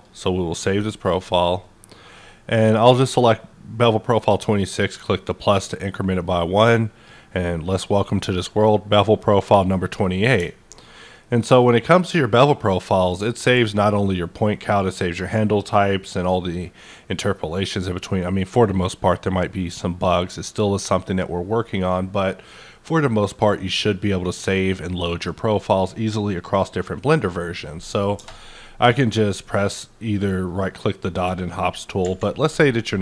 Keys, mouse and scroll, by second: 5.1 click, 6.6-9.4 drag, 9.5-11.6 drag, 9.6-16.2 middle drag, 11.6-16.2 ctrl+drag, 28.1-33.0 ctrl+drag, 30.4 right click.